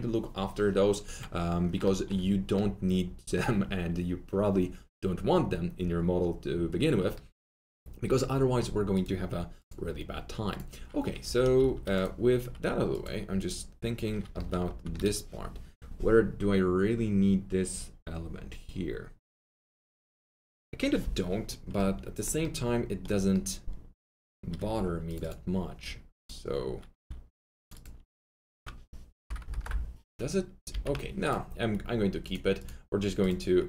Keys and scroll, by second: 11.3-12.0 typing, 14.0-15.1 typing, 24.7 2, 29.5 ctrl+BackSpace, 30.7 ctrl+z.